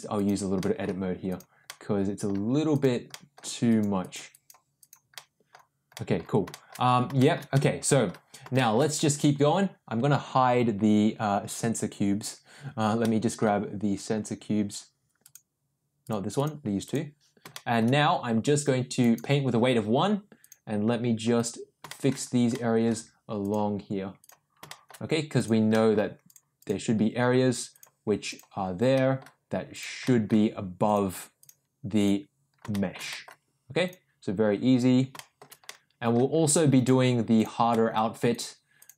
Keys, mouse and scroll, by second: 0.1 click, 0.5 middle click, 1.2 click, 1.6 middle click, 2.7 click, 3.0 middle click, 3.6 click, 4.0 click, 4.2 click, 4.7 click, 5.1 middle click, 5.9 middle click, 6.5 shift+middle click, 7.1 shift+middle click, 7.5 middle click, 8.5 shift+middle click, 13.0 middle click, 15.2 click, 16.0 click, 16.3 click, 16.8 click, 17.5 shift+middle click, 18.9 click, 20.4 click, 21.3 click, 21.8 shift+middle click, 22.5 middle click, 23.4 click, 24.2 click, 24.6 shift+middle click, 25.3 click, 25.7 middle click, 26.2 click, 26.5 click, 27.7 click, 28.2 click, 28.9 middle click, 29.7 click, 30.0 middle click, 30.8 click, 31.4 click, 31.9 click, 32.7 shift+middle click, 33.0 middle click, 33.8 click, 35.1 shift+middle click, 35.6 middle click, 36.7 click, 37.3 click, 37.7 middle click, 38.3 click, 38.7 click.